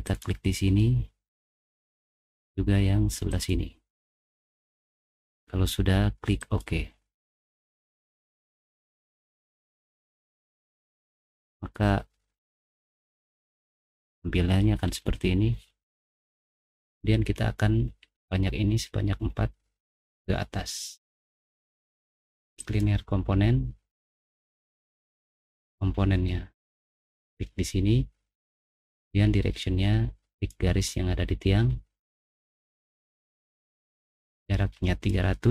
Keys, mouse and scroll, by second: 0.0 right click, 0.8 middle click, 0.9-1.3 scroll down 2, 1.3 middle click, 2.2-2.5 scroll down 1, 3.3 click, 6.4 click, 8.3 click, 9.0 middle click, 9.4 middle click, 9.8 middle click, 10.5 click, 11.2 middle click, 11.2 scroll up 1, 11.7-12.7 middle drag, 12.8 scroll down 1, 13.0 middle click, 13.9 middle click, 14.9 middle click, 22.6 click, 25.3 click, 26.7 click, 26.9 middle click, 28.2 middle click, 28.9 click, 30.3 click, 31.2 middle click, 31.6 middle click, 34.0-35.0 drag.